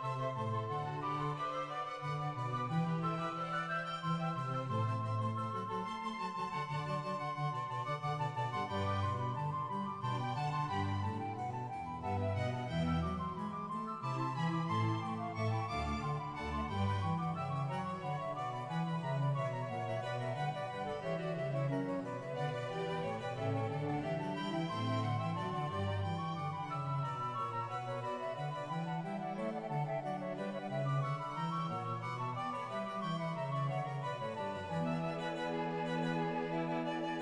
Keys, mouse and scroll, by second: 0.5 g, 1.7 Tab, 1.7 click, 1.8 a, 1.9 a, 1.9 right click, 2.1 click, 4.3 shift+middle click, 4.5-5.7 scroll down 1, 5.7 right click, 5.7 shift+click, 5.7 g, 7.4 shift+Tab, 7.4-8.5 shift+middle drag, 7.4-8.5 scroll down 1, 8.5 Tab, 8.5-10.2 drag, 8.5-10.2 scroll down 2, 8.5 a, 10.8 shift+right click, 10.8 g, 10.8 y, 12.9 Tab, 12.9 middle click, 12.9 a, 12.9 shift+n, 13.1 shift+n, 15.4 shift+middle click, 15.4 ctrl+right click, 15.7 shift+middle click, 15.7 scroll down 2, 17.3 right click, 20.0 scroll up 3, 20.2 shift+middle click, 20.5-22.1 scroll down 3, 25.0 ctrl+right click, 27.7 right click, 27.7 g, 27.9 click, 27.9 a, 29.4 right click, 29.4 shift+click, 29.4 g, 29.9 g, 31.7 ctrl+r, 31.7 right click, 34.7 middle click, 34.7 KP_1, 36.4 shift+middle click, 36.4-36.7 scroll down 2, 37.0 shift+middle click.